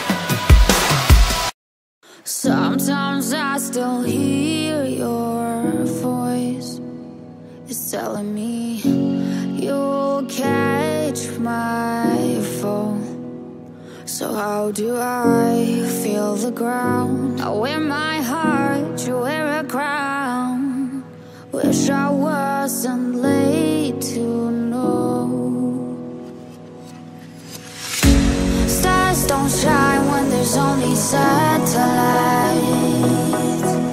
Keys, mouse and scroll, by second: 0.7 shift+click, 1.1 shift+click, 2.2 shift+click, 2.8 shift+click, 3.3 shift+double click, 3.8 shift+click, 13.5 shift+click, 14.0 shift+double click, 15.0 shift+scroll down 2, 18.8 shift+click, 20.8 middle click, 23.0-23.4 scroll up 2, 23.4-23.8 scroll down 3, 26.4 shift+click, 31.4-31.9 scroll down 4, 32.3 scroll up 2, 32.9 scroll up 3.